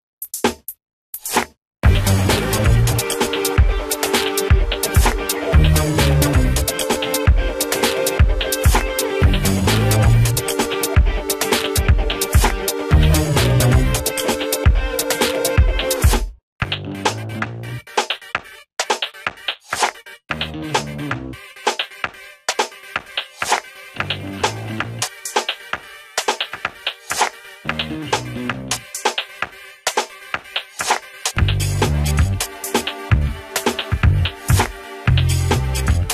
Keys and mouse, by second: 9.1 right click, 10.0-17.2 drag, 17.2 ctrl+z, 17.7-31.1 drag, 31.1 ctrl+space, 31.6 click.